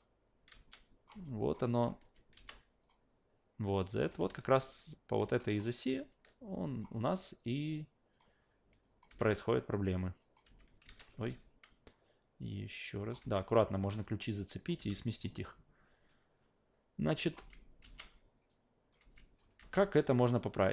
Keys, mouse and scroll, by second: 0.5 e, 0.5-1.1 drag, 1.2-1.5 alt+drag, 1.8 click, 2.3 e, 2.8 click, 3.6 click, 4.1 ctrl+z, 4.4 alt+click, 5.3 alt+click, 6.7 click, 8.1 click, 8.8 click, 9.1 f, 9.5 click, 10.2 click, 10.4 f, 10.9 ctrl+z, 11.3 a, 12.5-13.1 drag, 13.2 f, 13.7 click, 14.3-14.7 drag, 14.8 f, 15.2 click, 16.1-17.3 drag, 17.4 alt+v, 17.8 alt+v, 18.5 alt+click, 19.0 alt+v, 19.6 alt+v, 20.2-20.7 drag.